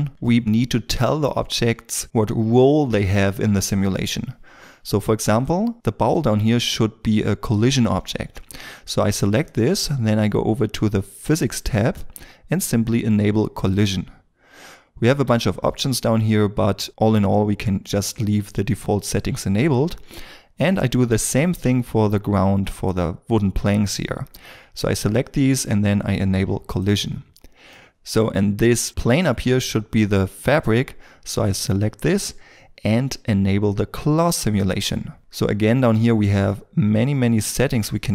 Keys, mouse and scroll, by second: 0.1 shift+middle click, 5.7 middle click, 27.7 middle click, 35.2 scroll down 1.